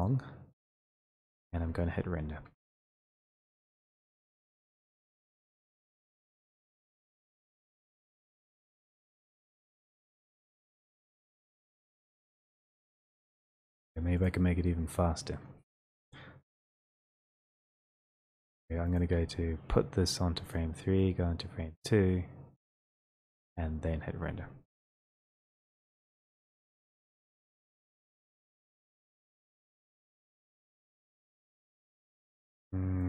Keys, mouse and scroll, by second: 0.0 click, 2.4 F12, 4.9 click, 8.3 click, 14.3 click, 15.7-16.1 ctrl+scroll, 16.4 ctrl+click, 16.4 middle click, 16.5-18.1 scroll, 19.0 click, 19.2 w, 20.8 click, 24.8 F12.